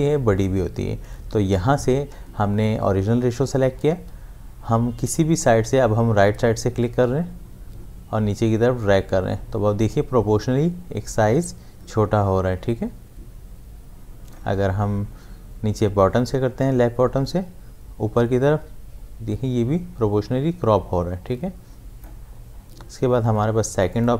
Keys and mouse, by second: 7.0-16.6 drag, 16.6-23.9 drag.